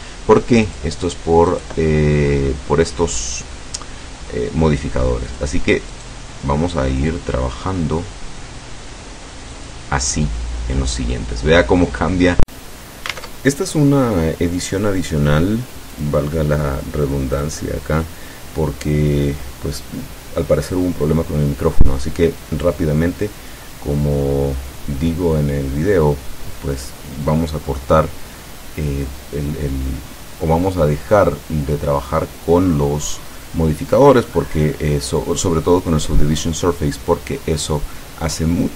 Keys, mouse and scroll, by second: 0.7 click, 1.6 click, 5.3 click, 5.9 right click, 9.6 click, 10.4-12.6 middle drag, 13.1 KP_0, 14.9-18.7 middle drag, 18.8 scroll up 2, 21.2 click, 22.2-24.9 middle drag, 25.9 click, 26.6-28.0 middle drag, 28.2-29.6 middle drag.